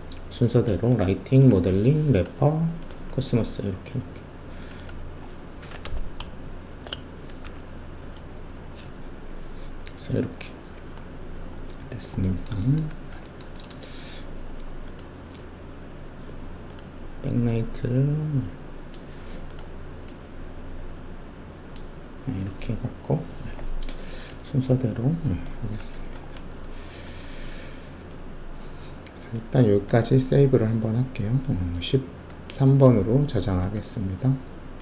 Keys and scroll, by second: 5.8 Home, 6.7 shift+i, 7.4 Delete, 8.0 Return, 26.7 alt+shift+F1.